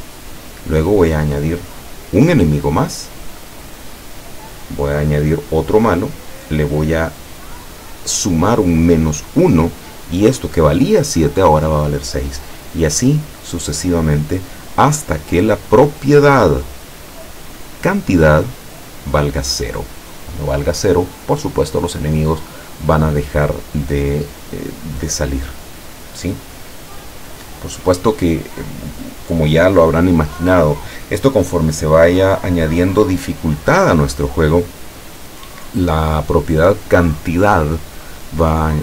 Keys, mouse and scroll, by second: 15.7-16.5 middle drag.